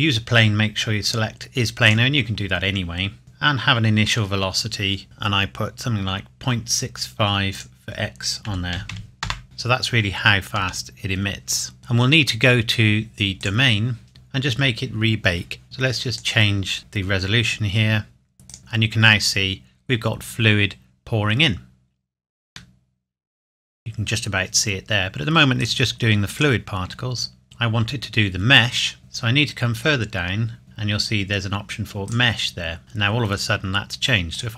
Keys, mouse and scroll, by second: 1.9 click, 7.6 click, 8.5 KP_Decimal, 8.8 KP_6, 8.9 KP_5, 9.3 KP_Enter, 10.6 space, 11.8 click, 13.4 click, 14.1-15.6 scroll down 1, 15.6 click, 18.5 click, 22.8 middle click, 25.6 click, 27.4 middle click, 29.0 scroll down 1, 32.1 click, 34.3 click.